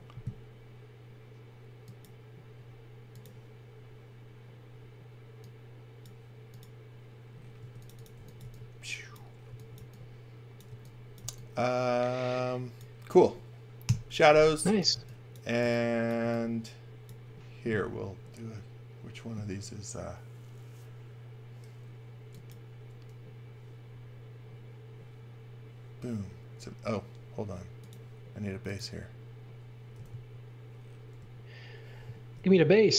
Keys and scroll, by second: 7.5-11.2 typing, 13.8-16.2 typing, 18.4 space, 29.7-31.3 typing, 32.3 i.